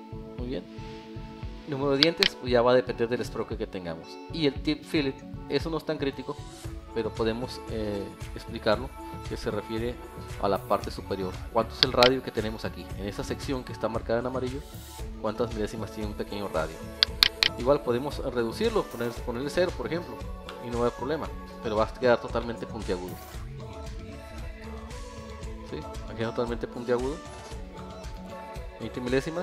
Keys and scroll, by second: 7.6 alt+1, 20.2 alt+F1, 24.2 alt+1.